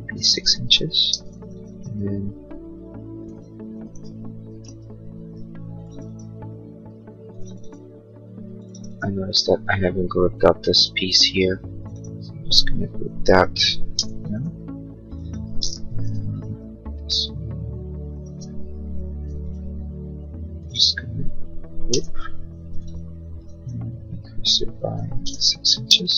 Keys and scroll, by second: 0.0 6, 0.2 Return, 1.0 space, 4.7 ctrl+z, 13.9 g, 16.0 p, 18.3 space, 21.9 g, 25.2 Return, 25.7 space, 26.0 Escape.